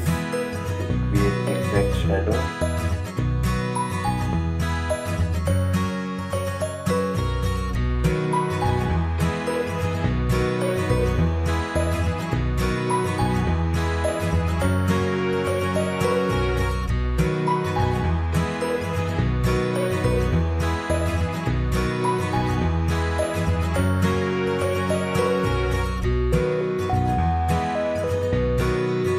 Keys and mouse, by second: 8.3 click, 11.4 click, 18.3 ctrl+z, 19.0-24.6 drag.